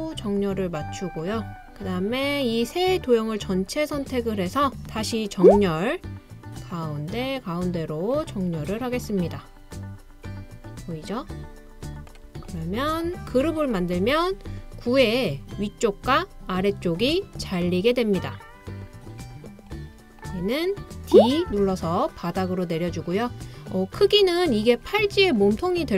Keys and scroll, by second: 4.7-5.5 typing, 9.6 typing, 18.7-19.7 typing, 21.5 typing.